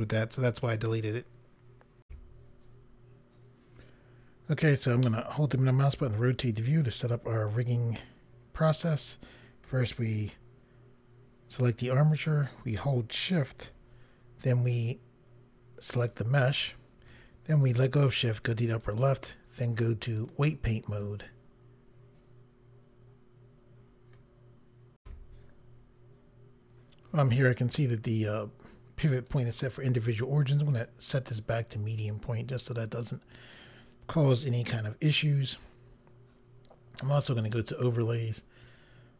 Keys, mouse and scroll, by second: 3.2 Pause, 5.0 middle click, 11.5 click, 16.0 shift+click, 18.7 click, 20.2 click, 25.0 Pause, 29.3 click, 30.7 click, 37.4 click.